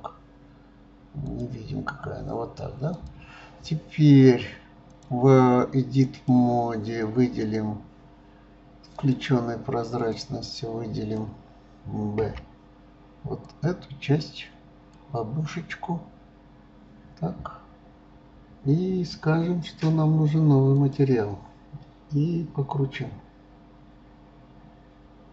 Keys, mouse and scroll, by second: 1.2 click, 2.9 click, 4.9-7.9 drag, 8.9 click, 10.1 click, 12.2 b, 20.7 click.